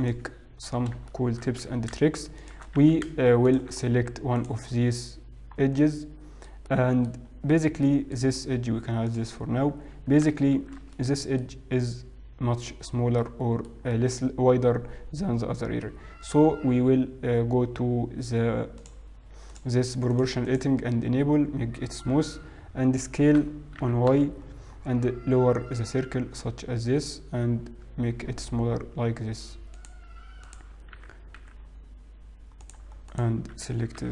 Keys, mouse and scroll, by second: 0.0 g, 1.3 shift+middle click, 1.3-3.2 scroll up 4, 3.2 g, 3.2 s, 5.4 alt+click, 5.4-6.2 scroll down 4, 6.2 middle click, 7.2 middle click, 7.6 scroll up 1, 7.9 middle click, 9.2 click, 10.1-10.5 scroll down 2, 10.6 shift+z, 11.0 middle click, 11.8-12.2 scroll up 2, 12.6-13.0 scroll up 2, 13.2 middle click, 14.5 middle click, 15.6 scroll down 1, 15.8 middle click, 17.0 scroll down 1, 18.9 click, 19.6 click, 20.2 click, 20.6 click, 23.8 shift+middle click, 24.0 s, 30.6 alt+click, 31.0 s.